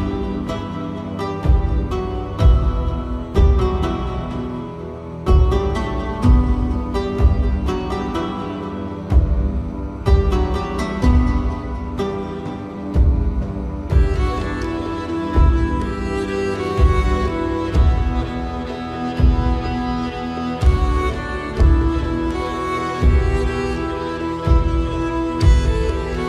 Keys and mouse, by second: 0.6 middle click, 1.5 middle click, 2.4 click, 3.4 KP_1, 4.4 shift+middle click, 5.2 middle click, 6.4 ctrl+r, 9.8 middle click, 13.3 shift+click, 13.9 middle click, 14.6 shift+click, 15.2-16.3 middle drag, 18.3-20.9 middle drag, 23.9 middle click, 24.8 KP_3.